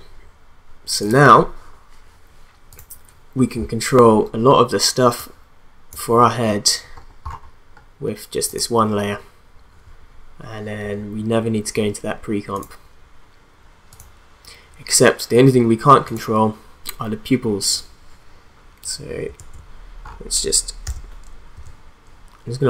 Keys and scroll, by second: 19.4 ctrl+a, 20.8 u.